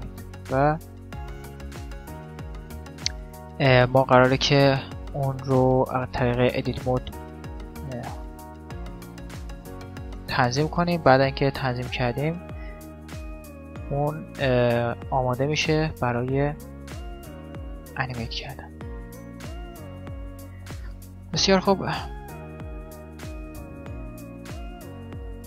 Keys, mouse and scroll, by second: 0.4-2.4 middle drag, 1.4-3.0 right drag, 3.8-5.4 drag, 5.6 click, 6.6-8.4 right drag, 8.6-11.3 right drag, 11.5-13.2 right drag, 14.0 Tab, 15.8-17.6 right drag, 16.6 Tab, 18.0-21.2 right drag, 21.4-23.0 typing, 22.0-23.8 drag, 23.8 middle click, 24.4-25.4 right drag, 24.7 x.